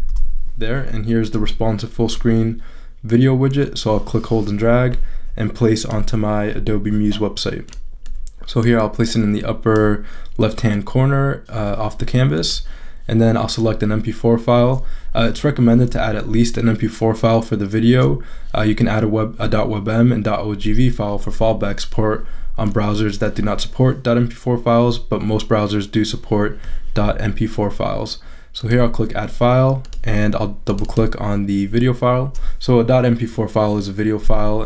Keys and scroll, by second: 0.0-0.6 typing.